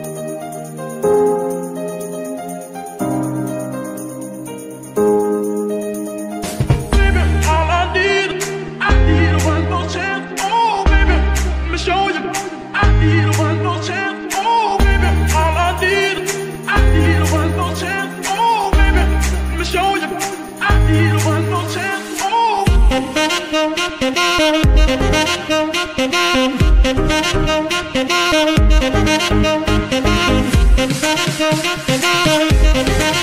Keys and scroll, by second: 9.0 Escape, 9.7 r, 11.1 g, 13.6 Escape, 15.4 r, 21.2 g, 21.3 y, 25.2 Escape.